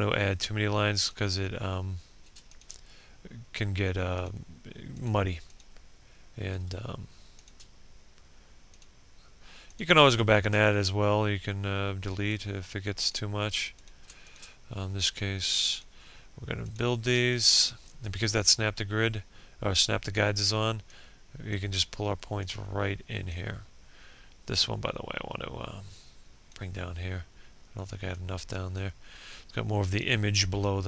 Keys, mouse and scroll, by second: 1.6 shift+click, 6.5 shift+click, 7.8 click, 9.4 shift+click, 13.3 shift+click, 16.3 shift+click, 19.8-30.3 drag.